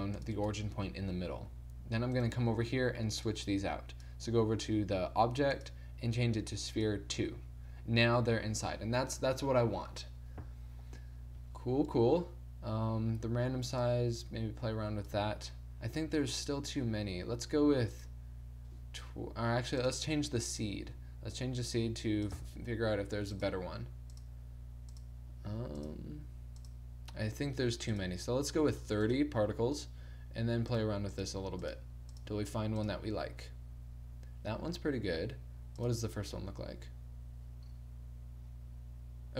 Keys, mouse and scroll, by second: 0.5 Tab, 1.5 1, 3.3 middle click, 7.4 middle click, 13.8-19.9 drag, 22.4-37.4 drag, 37.6 middle click, 38.5 click.